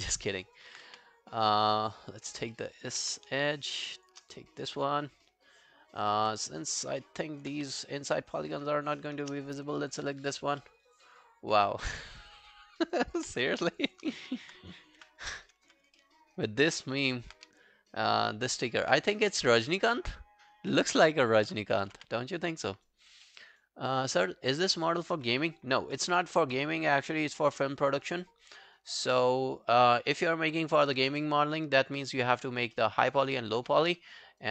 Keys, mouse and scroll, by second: 0.0 alt+right click, 0.4 alt+right click, 0.9 q, 1.1 right click, 2.1 double click, 2.4 alt+scroll down 1, 2.5 alt+middle click, 2.8 alt+right click, 3.0 q, 3.9 shift+click, 4.0 shift+click, 4.4 alt+click, 6.1 alt+middle click, 6.5 alt+scroll down 1, 6.6 alt+click, 7.0 alt+middle click, 7.3 alt+right click, 7.6 q, 7.8 right click, 9.8 alt+middle click, 10.1 alt+right click, 10.3 alt+click, 10.6 alt+middle click, 10.9 alt+right click, 11.1 alt+click, 12.0 alt+middle click, 12.2 alt+right click, 12.5 alt+click, 12.8 alt+right click, 13.0 alt+click, 13.7 shift+click, 13.9 shift+click, 14.2 shift+click, 14.2 alt+scroll down 1, 15.0 Delete, 16.0 alt+middle click, 16.2 alt+right click, 16.5 alt+click, 16.9 alt+right click, 17.1 alt+click, 17.4 q, 17.7 right click, 18.5 alt+middle click, 19.7 alt+click, 21.5 alt+middle click, 21.7 alt+right click, 22.0 q, 22.2 right click, 23.3 alt+middle click, 23.5 alt+right click, 27.8 alt+right click, 28.2 alt+click, 28.4 alt+right click, 28.7 alt+click, 29.2 alt+middle click, 29.5 alt+right click, 29.7 alt+click, 30.3 alt+middle click, 30.5 alt+right click, 30.8 alt+click, 31.2 alt+middle click, 32.0 alt+middle click, 32.2 alt+right click, 32.4 alt+click, 32.8 alt+middle click, 33.0 alt+right click, 33.3 alt+click, 33.6 alt+q, 33.9 right click.